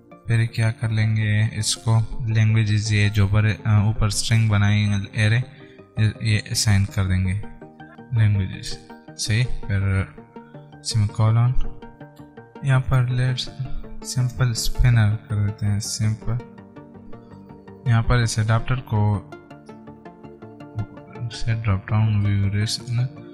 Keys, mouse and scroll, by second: 1.7 typing, 6.0-8.4 typing, 9.1 Right, 9.8 ;, 12.1 alt+Tab, 13.3 click, 13.8 ctrl+Right, 15.5 typing.